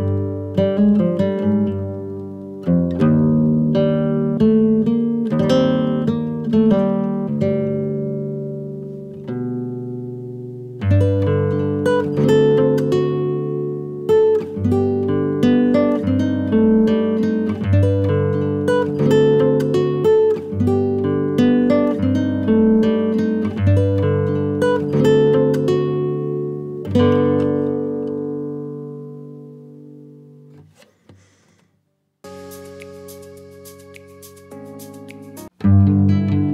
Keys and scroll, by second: 2.7 F2, 7.7 space, 7.9 Escape, 11.3 ctrl+r, 15.4 F3, 16.0 ctrl+r, 18.2 ctrl+g, 18.4 F2, 25.8 F3, 26.6 ctrl+r, 28.7 ctrl+r, 31.9 alt+b, 33.4 Return.